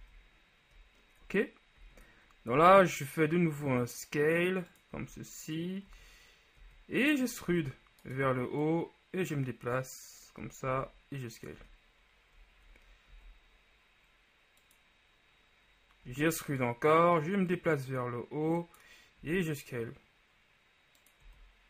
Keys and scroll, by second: 0.1 z, 1.3-2.6 typing, 5.0 z, 6.7 z, 7.6 e, 10.8 s, 13.2 ctrl+s, 16.2 e, 19.4 s.